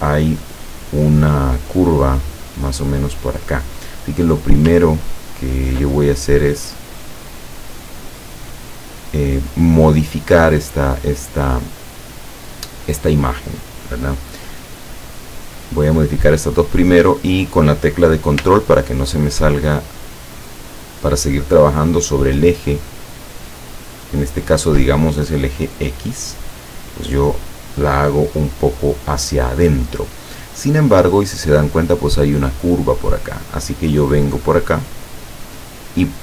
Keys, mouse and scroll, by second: 5.3 ctrl+scroll down 2, 6.7-8.1 drag, 14.0 click, 14.9 click, 19.4-24.9 ctrl+drag.